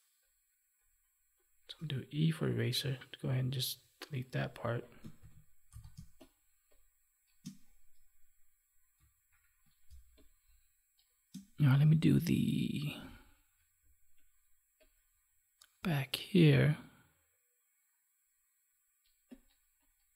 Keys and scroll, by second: 5.1 ctrl+s, 5.9 space, 9.4 F9, 9.8 space.